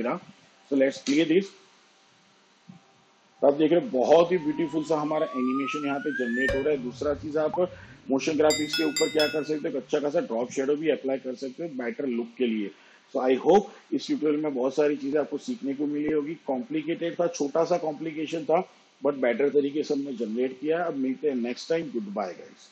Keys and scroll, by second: 3.0 space.